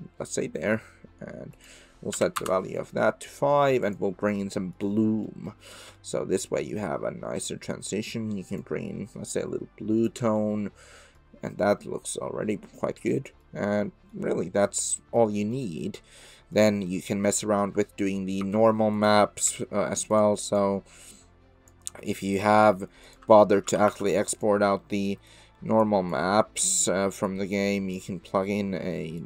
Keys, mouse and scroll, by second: 0.6 middle click, 1.5-2.9 drag, 3.8 click, 4.3-4.7 middle drag, 5.2 middle drag, 5.9-7.7 middle drag, 8.5 click, 10.3 click, 10.6 middle click, 10.7 click, 10.8 middle click, 13.1 drag, 13.2 middle click, 13.3 click, 13.8-14.2 drag, 14.9 click, 15.5 click, 16.4 click, 17.0 click, 17.5 click, 18.4 shift+a, 21.1-21.7 drag, 22.1 click, 23.0 click, 23.6 ctrl+c, 25.5 ctrl+v, 25.5 click, 26.3 click, 27.3 click, 28.4 click, 29.2 click.